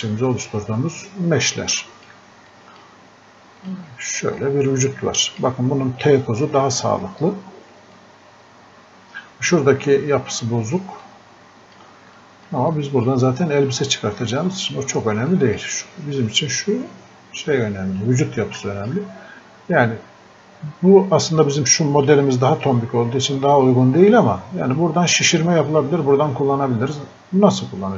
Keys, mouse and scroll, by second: 0.3-0.6 scroll up 1, 1.9 alt+click, 2.5 click, 7.1-7.5 scroll up 1, 8.0 click, 13.7-14.1 scroll up 1, 15.3 click, 17.5-17.8 scroll up 1, 18.6-22.2 alt+drag.